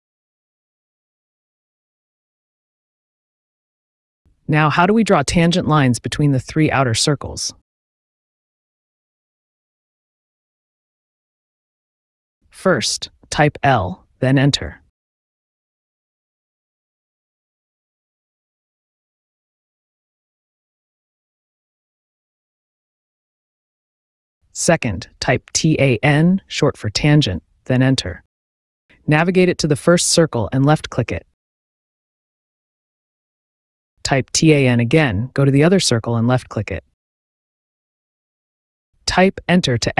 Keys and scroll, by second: 2.7 Return, 12.8 l, 13.1 i, 14.6 n, 14.7 e, 17.9 Return, 24.4 t, 24.6 a, 25.0 n, 26.6 space, 34.2 t, 34.3 a, 34.6 n, 35.7 space.